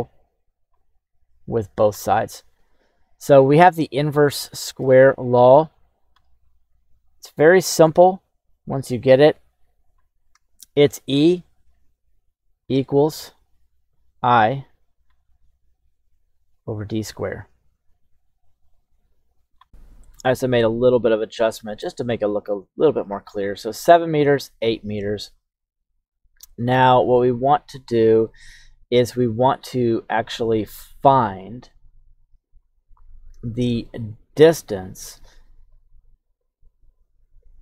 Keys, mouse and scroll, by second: 1.2 click, 3.1-4.1 scroll down 1, 4.1 scroll down 1, 4.1 shift+middle click, 5.4 click, 6.9 click, 8.1 click, 9.3 click, 11.4 click, 12.2 click, 13.0 click, 14.5 click, 15.3 click, 16.2 click, 16.9-18.4 drag, 18.7 click, 25.5 right click, 26.4 click, 27.7 q, 32.6 click, 35.5-36.9 drag.